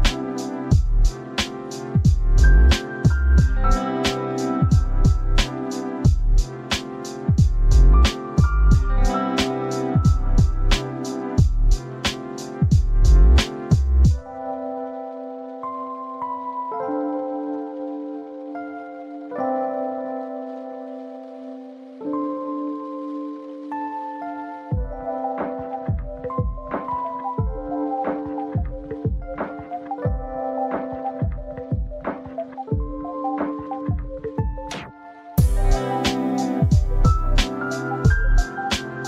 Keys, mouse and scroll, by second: 3.6-4.2 scroll up 1, 4.2-5.0 scroll up 2, 5.0-6.4 middle drag, 6.4-17.8 drag, 20.9-23.1 drag, 23.2 click, 25.2-27.2 middle drag, 27.2-35.1 drag, 37.2 click.